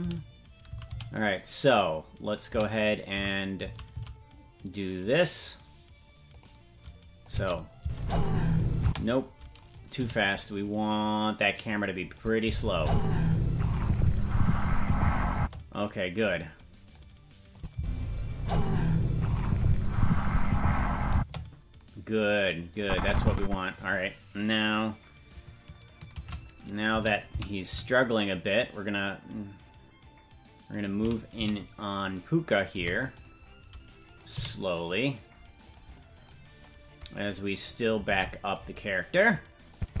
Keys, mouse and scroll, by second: 7.2 click, 7.8 space, 8.8 space, 9.6 right click, 9.9 g, 12.1 click, 12.4 space, 15.3 space, 17.5 click, 17.7 space, 21.1 space, 22.8 click, 26.1 shift+`, 34.0 right click, 34.3 g, 37.6 right click, 38.1 ctrl+Tab, 38.5 right click, 39.7-40.0 drag.